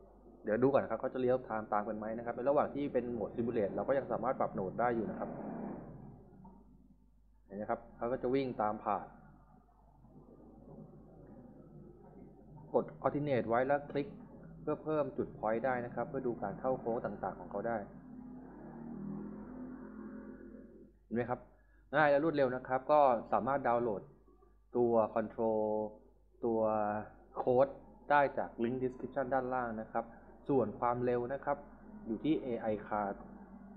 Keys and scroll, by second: 2.4-3.8 typing, 7.9 s, 20.1 s, 20.7 d.